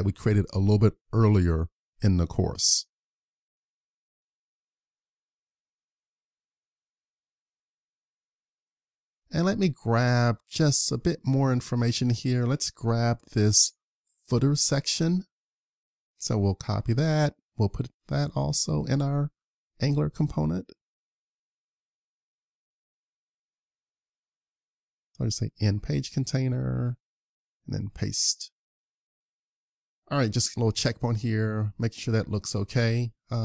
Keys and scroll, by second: 6.2 super+Tab, 18.0 super+c, 19.3 super+Tab, 29.2 super+v, 30.7 super+Tab.